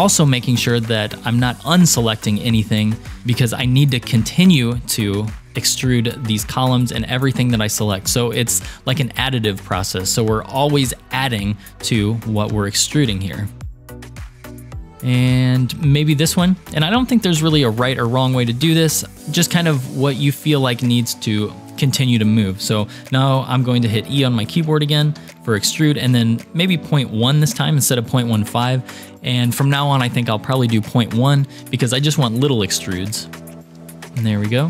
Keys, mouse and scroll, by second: 2.7 shift+middle click, 5.9 scroll up 2, 7.3-9.2 shift+drag, 11.8-13.7 shift+drag, 14.0 shift+middle click, 16.2-17.4 shift+drag, 18.2-19.4 middle drag, 19.6-32.4 shift+middle drag, 25.2 e, 33.0-34.6 middle drag.